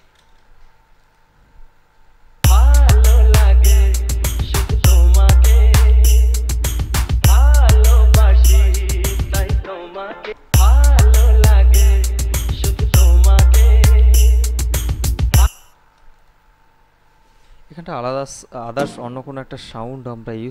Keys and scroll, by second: 0.0 space, 2.6 space, 10.5 space, 15.7 space.